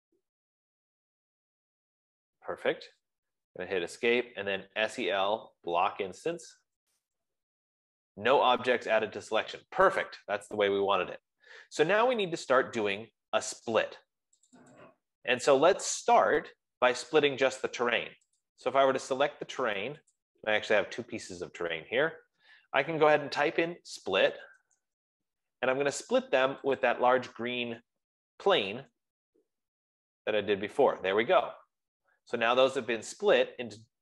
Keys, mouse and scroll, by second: 3.9 Escape, 4.7-6.7 typing, 7.1 Return, 10.1 Escape, 11.0 typing, 14.8 click, 16.1 click, 19.6 click, 21.1-34.0 shift+click, 24.8-27.9 typing, 27.4 click, 29.1-29.9 typing, 30.5-32.2 drag, 33.6 F15.